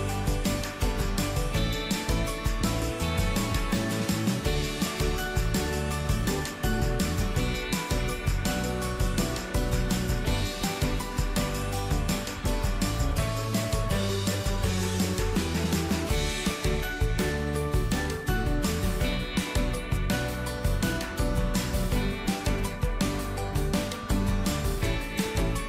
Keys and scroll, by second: 0.2 ctrl+d.